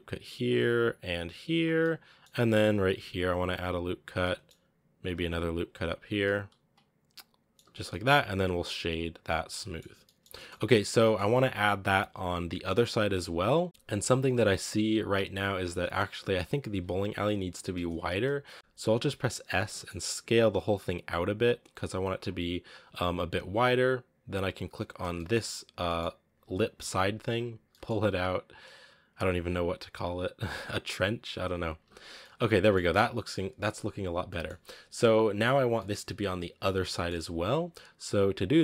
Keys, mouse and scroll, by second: 0.6 ctrl+r, 1.6 scroll up 1, 1.6 middle click, 2.5 ctrl+r, 4.0 scroll down 1, 4.0 middle click, 5.0 ctrl+r, 6.1-7.5 middle drag, 7.5 Tab, 7.6 scroll down 2, 7.7-9.1 middle drag, 9.1 w, 9.4-9.7 middle drag, 9.7 a, 9.9-13.2 shift+middle drag, 13.2-13.7 scroll down 2, 13.6 middle drag, 14.4-15.9 scroll up 2, 15.9-16.4 right drag, 16.4 scroll down 2, 17.9-18.4 scroll up 2, 18.4 scroll down 1, 18.5 Tab, 19.4 s, 24.6-25.0 right drag, 25.0-27.0 shift+middle drag, 27.0-27.5 scroll up 1, 27.5 g, 31.6 a, 31.9 scroll down 1, 32.1-32.6 middle drag, 32.6 scroll up 3, 32.8-33.9 middle drag, 33.9 scroll down 2, 34.1-35.3 middle drag, 35.3-35.6 right drag, 35.6-37.5 middle drag, 37.5-38.6 scroll up 1.